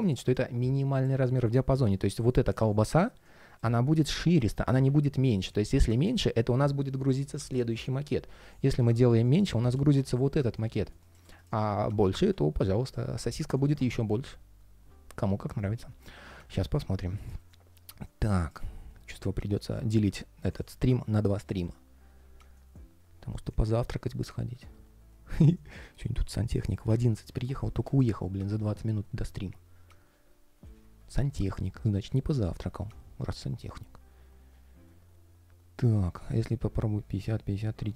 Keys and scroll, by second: 4.6 super+z.